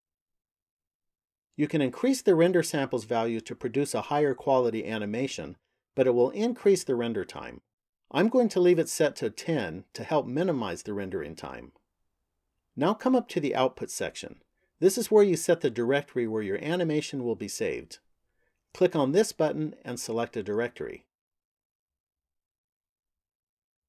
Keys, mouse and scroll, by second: 1.1 click, 19.1 click.